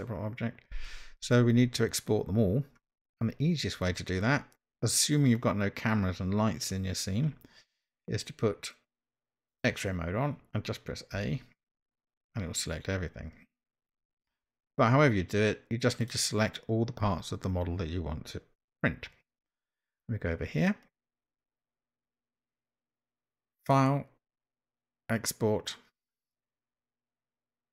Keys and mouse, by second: 9.6 click, 11.8 a, 16.1 click, 23.6-27.7 drag.